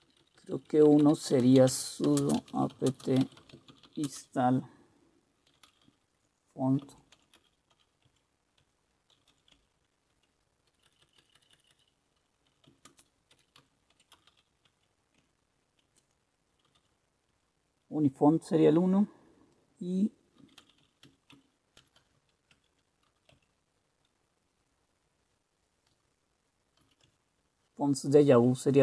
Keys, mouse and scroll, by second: 0.0-14.9 typing, 15.3 Tab, 16.6-17.3 typing, 17.4 Tab, 20.3-23.7 typing, 22.6 Tab, 26.7-27.4 typing.